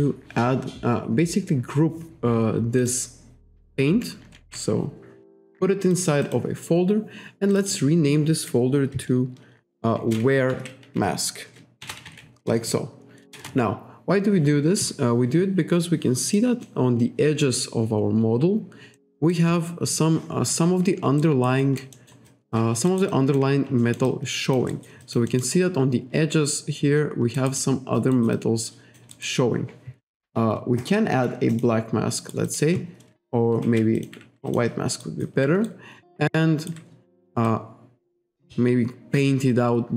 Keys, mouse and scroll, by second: 2.9 click, 4.4 ctrl+g, 5.9 click, 6.3 click, 7.6 click, 9.8-12.8 typing, 13.4 Return, 16.0-16.4 scroll up 1, 16.4 middle click, 16.9-17.4 scroll down 1, 17.5-18.4 scroll down 1, 19.0 middle click, 19.7-20.1 scroll up 1, 21.3 alt+right click, 21.7 alt+click, 22.0 alt+middle click, 22.3 alt+click, 23.0 alt+right click, 23.2 alt+click, 23.9 alt+middle click, 24.1 alt+click, 24.8 alt+right click, 25.1 alt+click, 27.4 alt+right click, 27.7 alt+click, 28.4 alt+click, 29.2 alt+right click, 30.9 click, 31.6 click, 32.3 alt+right click, 33.7 ctrl+z, 34.0 click, 34.6 click, 35.1 alt+right click, 35.7 ctrl+right click, 37.5 click.